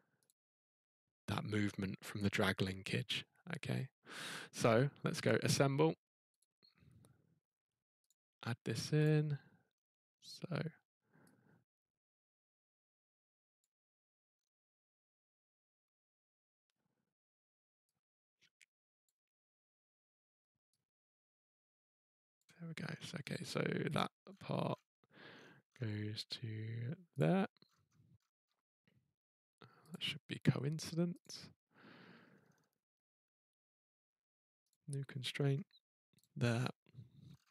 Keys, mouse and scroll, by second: 0.2 click, 4.0 middle click, 6.4 click, 7.4-8.0 scroll, 8.0 click, 9.0 click, 9.7-10.2 scroll, 13.6 click, 14.1-14.5 scroll, 16.6-17.9 scroll, 19.0 click, 19.5-20.4 scroll, 22.3 click, 22.8-23.3 scroll, 23.9 click, 24.3-25.7 scroll, 27.2 click, 27.6-28.2 scroll, 29.9 click, 31.2 click, 32.3-33.3 scroll, 34.7 click, 35.3 scroll, 36.2 click, 36.5 scroll, 37.2-37.5 scroll.